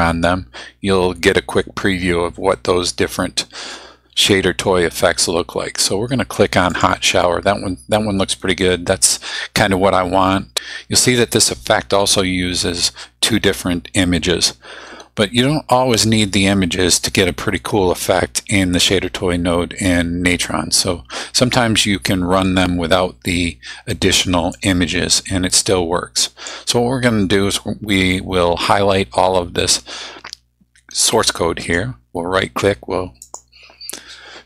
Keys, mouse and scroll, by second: 6.7 click, 24.5-26.6 drag, 33.2 click.